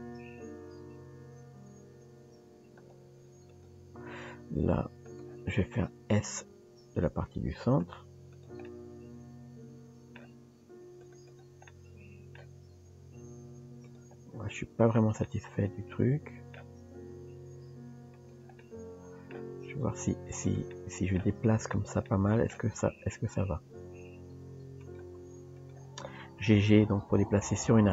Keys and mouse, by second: 3.5 click, 5.2 click, 8.7-10.2 middle drag, 11.3 click, 11.7 middle click, 15.3-16.6 middle drag, 18.6 middle click, 20.7 middle click, 21.6 click, 22.1 middle click, 25.6 click.